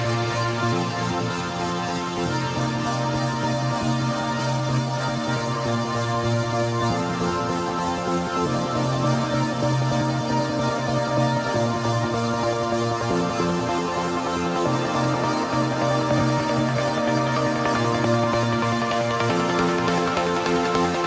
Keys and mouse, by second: 0.5 click, 1.4 KP_9, 1.7 KP_0, 2.1 Return, 4.3 right click, 5.3 right click, 6.7 click, 7.4 KP_0, 7.7 Return, 9.2 click, 16.4 KP_1, 16.5 KP_4, 16.8 Return, 20.1 click.